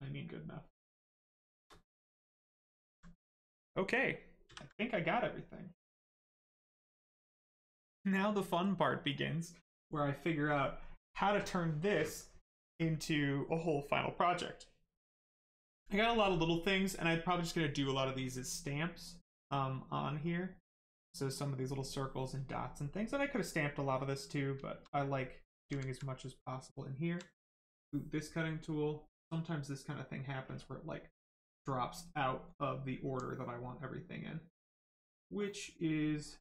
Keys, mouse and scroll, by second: 2.0 alt+right click, 3.7 ctrl+right click, 6.2 click, 9.6 right click, 22.8 right click, 24.5 shift+right click, 25.0 alt+right click, 26.3 right click, 26.4 right click, 26.8 alt+right click, 29.0 click, 31.6 right click, 32.6 alt+right click, 35.8 right click.